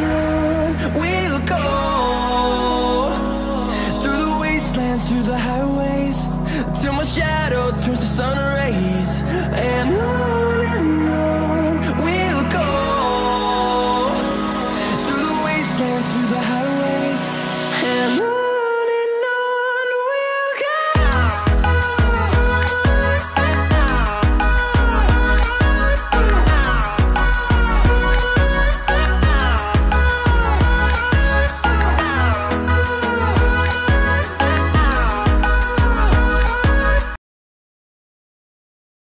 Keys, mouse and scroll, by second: 0.3 ctrl+z, 1.9 click, 2.0 scroll up 1, 2.3 click, 2.4-5.9 drag, 7.6 right click, 8.6 click, 8.8 click, 9.6 click, 10.6 scroll down 1, 13.2 scroll up 1, 13.5-26.4 drag, 26.9-29.7 drag, 30.3 scroll down 1, 31.5 scroll up 1, 32.5-38.0 drag, 38.0 shift+right click.